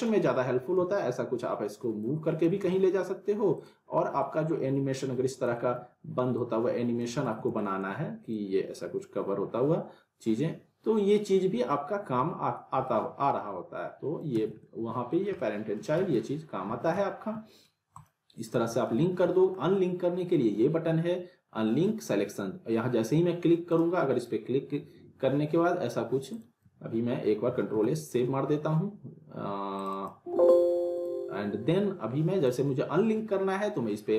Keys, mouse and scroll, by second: 0.8 z, 2.0-2.6 click, 2.6 ctrl+z, 3.5 click, 3.9 scroll down 1, 4.2-4.8 alt+middle click, 4.7-5.1 scroll down 1, 5.1 e, 5.5 alt+middle click, 6.3-7.3 click, 7.2 ctrl+z, 7.5 alt+middle click, 8.3-14.3 drag, 14.3 z, 14.6-15.2 alt+middle click, 15.0 scroll down 1, 15.4-16.0 alt+middle click, 16.1 ctrl+z, 16.7 w, 17.0-17.6 alt+middle click, 17.6 scroll up 1, 17.9 click, 18.7 w, 18.9-19.6 middle drag, 23.7 click, 27.7 ctrl+s, 29.8 click.